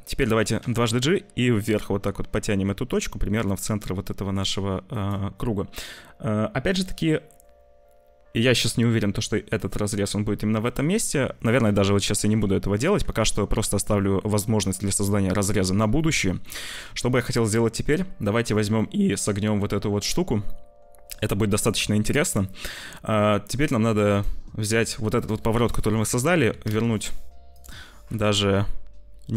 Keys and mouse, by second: 0.5 g, 10.8 ctrl+z, 11.6 z, 12.3 ctrl+s, 12.7 z, 13.8 c, 13.9 middle click, 15.5 Tab, 15.9 shift+middle click, 16.4 click, 16.8 ctrl+s, 18.7 click, 20.4 click, 23.7 click, 25.0-26.7 drag, 27.5-29.3 drag.